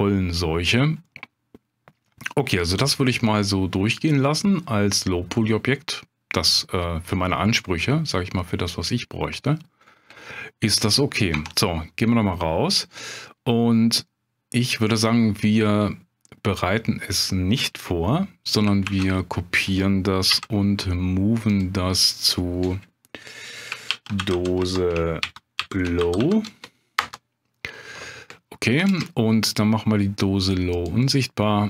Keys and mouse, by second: 1.0 middle click, 2.6-6.6 middle drag, 7.6-9.7 middle drag, 11.3 Tab, 18.8 shift+d, 20.3 m, 28.9 ctrl+space, 30.7 click.